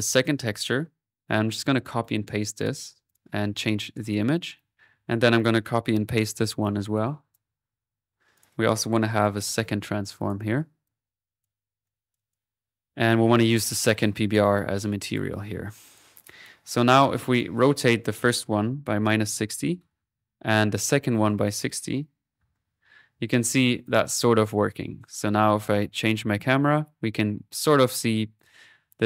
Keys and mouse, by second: 0.1 right click, 1.6-2.3 typing, 2.6-4.6 drag, 4.8 click, 5.4 click, 6.2 typing, 6.9-8.2 ctrl+drag, 8.3 click, 9.2 typing, 10.0 ctrl+click, 10.8 ctrl+click, 11.8 click, 13.1-14.1 drag, 15.0 click, 15.8 click, 16.2 click, 16.6 click, 17.3 click, 18.0-19.1 drag, 20.7 click, 21.4 click, 23.6-24.3 typing, 23.8-29.0 drag.